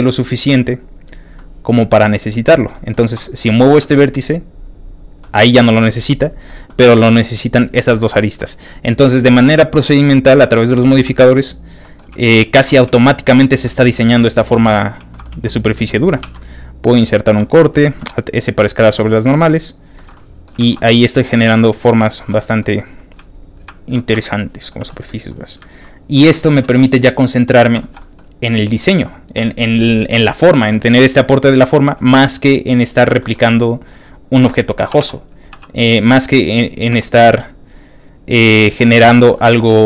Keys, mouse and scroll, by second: 0.0 ctrl+middle click, 0.9 click, 1.3 middle click, 2.0 middle click, 2.7 middle click, 3.2 shift+middle click, 3.4-3.8 scroll up 2, 3.8 shift+g, 5.0 click, 5.2 middle click, 5.7 shift+middle click, 6.2-7.9 shift+middle drag, 10.0 shift+middle click, 10.5 scroll down 2, 10.8 shift+middle click, 11.1 click, 11.5 shift+click, 11.8 shift+middle click, 12.5 middle click, 12.6 click, 12.6 shift+2, 13.1 shift+click, 13.5 shift+e, 13.9 click, 14.2 middle click, 14.5 e, 14.9 shift+click, 15.1 shift+middle click, 15.5 click, 15.9 middle click, 16.2 ctrl+r, 16.9 ctrl+click, 17.3 Escape, 17.9 alt+s, 19.7 alt+shift+click, 19.9 alt+shift+middle click, 20.1 alt+shift+middle click, 20.7 alt+shift+z, 20.7 middle click, 21.4 alt+shift+z, 21.6 alt+shift+middle click, 22.2 1, 22.4 alt+shift+middle click, 23.0 click, 23.6 click, 24.1 shift+f, 24.4 middle click, 24.8 f, 25.0 shift+middle click, 25.9 ctrl+click, 26.1 middle click, 27.5 click, 27.6 ctrl+b, 27.8 ctrl+shift+middle click, 28.0 ctrl+shift+middle click, 29.8 middle click, 30.7 middle click, 31.3 click, 31.8 shift+middle click, 32.1 click, 32.6 shift+click, 33.2 shift+middle click, 33.5 shift+click, 33.9 shift+click, 34.2 shift+click, 34.5 shift+middle click, 34.9 shift+g, 36.1 click, 36.4 click, 36.9 g, 38.3 click, 38.6 middle click, 38.9 scroll down 2, 39.1 shift+middle click, 39.3 shift+middle click, 39.7 shift+middle click, 39.7 scroll up 1.